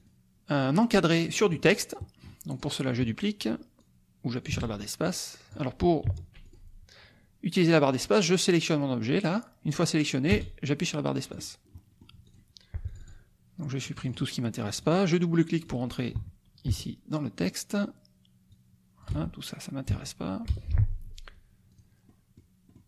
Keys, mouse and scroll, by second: 1.4 click, 2.0 click, 2.5 click, 3.9-5.7 drag, 4.5 space, 6.0 Delete, 6.6 click, 8.1-11.6 drag, 10.5 space, 11.7 click, 12.3 click, 12.9 click, 13.9 click, 14.9 click, 15.8 click, 16.2 BackSpace, 16.7 Delete, 18.5 click, 19.1 BackSpace, 19.9 Delete, 20.5 BackSpace, 21.7 click, 22.1 middle click, 22.6 click.